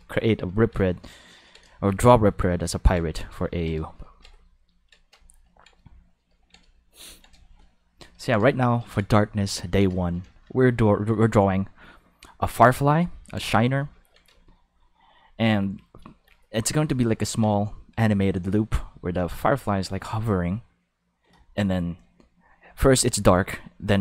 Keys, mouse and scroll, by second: 1.4 ctrl+middle click, 9.9 shift+middle click, 13.6 ctrl+shift+middle click, 14.3 shift+middle click.